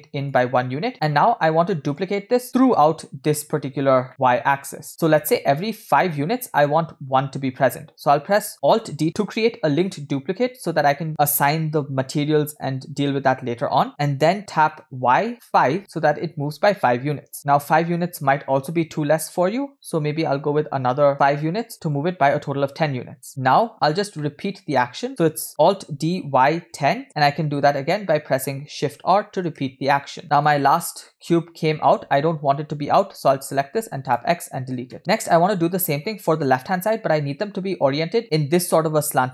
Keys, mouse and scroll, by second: 1.8 shift+middle drag, 2.1 scroll down 1, 3.3 scroll down 1, 4.1 shift+middle click, 4.9 scroll up 2, 5.2-5.8 shift+middle drag, 24.3-24.8 shift+middle drag, 27.7 scroll down 2, 30.2 shift+middle click, 31.2 scroll up 2, 33.9 x, 35.0 shift+middle click, 35.4 scroll down 1, 38.2 shift+middle click, 38.2-38.6 scroll up 5.